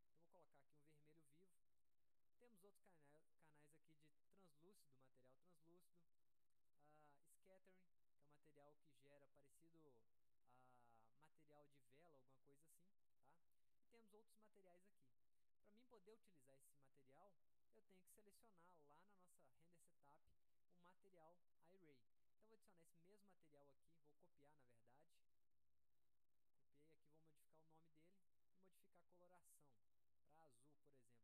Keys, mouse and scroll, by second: 1.0 click, 2.0-3.1 drag, 6.4-6.9 drag, 13.0 click, 22.9-24.4 drag, 25.3 click, 27.0 click, 28.3 click, 29.6 click, 30.6 click.